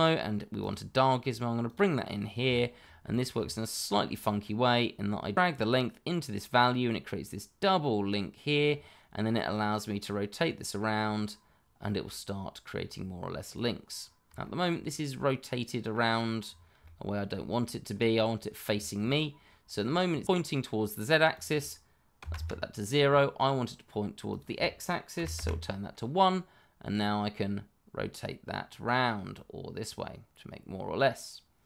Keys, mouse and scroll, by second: 0.5 click, 2.1 scroll down 1, 2.5 shift+middle click, 3.0-3.5 scroll up 1, 3.7 shift+middle click, 3.7 middle click, 3.8 shift+middle click, 5.3 click, 9.5 click, 14.4 shift+middle click, 14.4 middle click, 14.5 shift+middle click, 15.1 middle click, 16.4-16.7 scroll down 1, 17.4 shift+middle click, 17.9 scroll up 1, 18.8 shift+middle click, 19.4 middle click, 21.3 click, 22.2 0, 22.3 Return, 24.2 click, 25.1 1, 25.3 Return, 26.9 click.